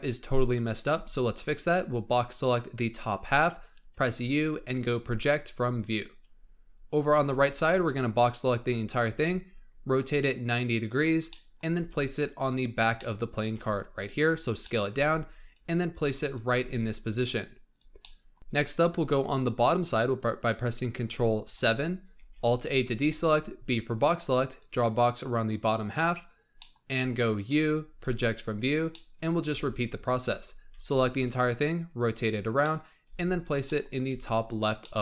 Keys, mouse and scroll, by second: 0.9 b, 7.2 b, 8.4 scroll up 2, 9.0 r, 11.2 middle click, 11.7 g, 12.6 scroll up 2, 12.9 middle click, 13.5 s, 14.2-14.5 scroll up 4, 14.5 middle click, 14.9 g, 15.6 scroll up 2, 15.9 s, 16.5 g, 17.9 middle click, 18.4-21.2 scroll down 4, 21.4 ctrl+KP_7, 22.1 alt+a, 22.9 b, 25.7-26.5 scroll down 8, 26.5 middle click, 27.4 u, 28.8 middle click, 29.4 b, 30.6 r, 32.5 middle click, 33.0 g, 33.6 middle click, 33.8 scroll up 3, 34.0 g, 34.6 scroll up 1, 34.7 middle click.